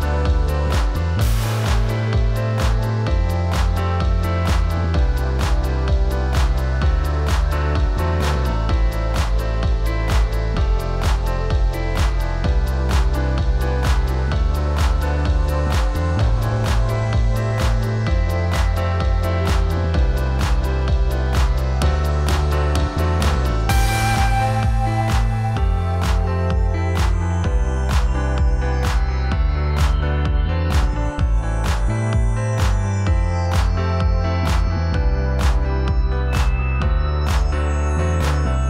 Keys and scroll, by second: 9.9 ctrl+t, 15.1 Down, 16.1 Right, 18.4 Up, 22.4 Right, 23.4 Down, 29.4 ctrl+a, 30.5 ctrl+c, 36.2 ctrl+v.